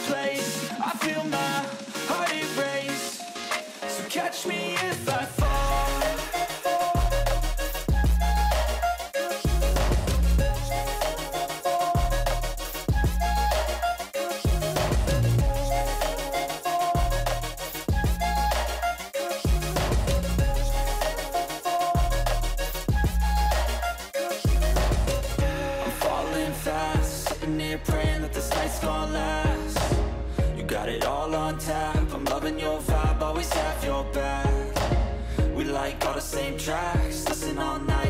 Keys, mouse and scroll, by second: 14.5 e, 15.7-21.6 typing, 24.1-25.9 typing, 27.7-34.6 typing, 35.6 ctrl+a.